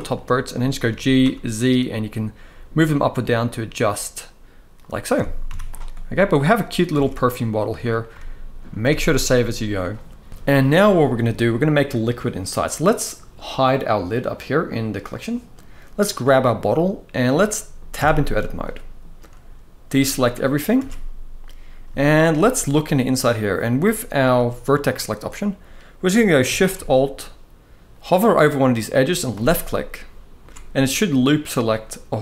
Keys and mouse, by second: 0.6 g, 0.9 z, 4.5 click, 4.9 Tab, 5.2 z, 6.2-6.6 middle drag, 6.6 alt+a, 6.8-7.6 middle drag, 8.5 ctrl+s, 8.7 ctrl+s, 8.9-9.5 middle drag, 10.3 shift+middle click, 10.3 shift+KP_1, 14.7 click, 15.8 click, 17.0-17.4 middle drag, 17.7 Tab, 18.0 middle click, 20.5 alt+a, 21.7 shift+middle click, 22.5 middle click, 29.0 alt+shift+click.